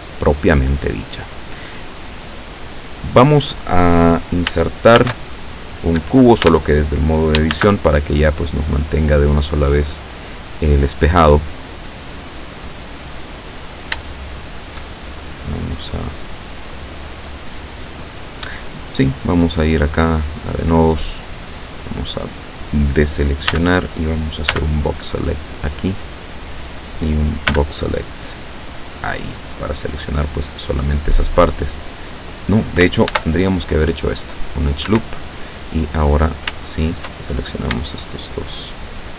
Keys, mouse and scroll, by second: 0.0 Tab, 5.1 shift+a, 6.1 Escape, 6.5 Tab, 7.6 shift+a, 9.3 click, 9.9 scroll down 1, 10.4 scroll down 1, 11.1 scroll down 1, 12.0 click, 13.4-13.9 scroll up 1, 14.1 shift+middle click, 20.3 click, 21.4 middle click, 23.6 a, 24.6 b, 25.0 click, 25.7-26.8 middle drag, 27.6 b, 28.0 click, 29.4-31.0 middle drag, 31.4-32.4 middle drag, 33.1 ctrl+r, 34.1 click, 34.9 Escape, 36.3 shift+right click, 36.7 shift+right click, 37.3 shift+middle click, 38.1 shift+right click, 38.8 shift+right click.